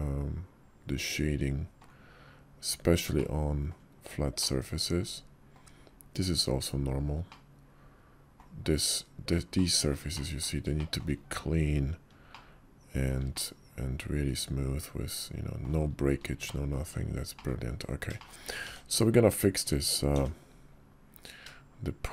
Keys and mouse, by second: 3.0-3.6 middle drag, 4.3-5.4 middle drag, 7.1-8.2 middle drag, 9.4 middle click, 10.0 shift+middle click, 10.6 shift+middle click, 12.2-12.9 shift+middle drag, 13.2-15.5 middle drag, 16.3 shift+middle drag, 17.2 click, 18.0 shift+middle click, 19.8 d.